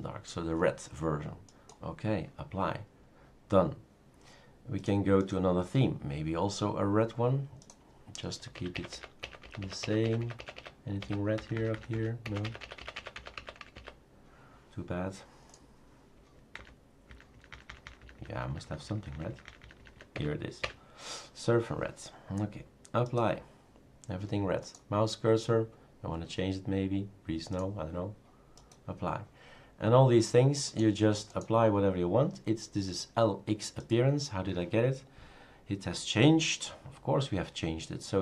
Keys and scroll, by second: 8.8 Up, 8.9 Up, 9.2 Up, 9.4 Up, 9.6 Up, 9.8 Up, 10.0 Up, 10.2 Up, 10.4 Up, 10.5 Up, 11.0 Up, 11.4 Down, 11.5 Down, 11.7 Down, 11.9 Down, 12.2 Up, 12.4 Up, 12.8 Up, 12.9 Up, 13.1 Up, 13.3 Up, 13.6 Up, 13.7 Up, 16.8 Down, 17.1 Down, 17.4 Down, 17.5 Down, 17.7 Down, 17.8 Down, 18.0 Down, 18.1 Down, 18.3 Down, 18.5 Down, 18.6 Down, 18.9 Down, 19.1 Down, 19.3 Down, 19.5 Down, 19.6 Down, 19.8 Down, 19.9 Down, 20.2 Up, 20.6 Up.